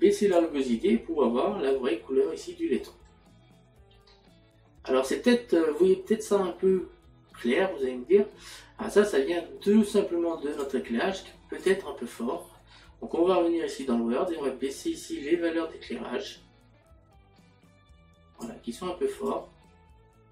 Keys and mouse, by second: 2.1 middle click, 4.0 middle click, 10.6 click, 14.3 click.